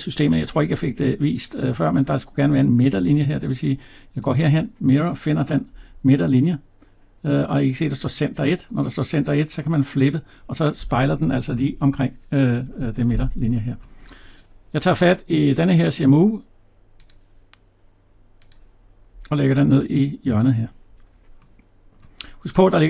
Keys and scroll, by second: 11.3 ctrl+z, 12.4 Escape.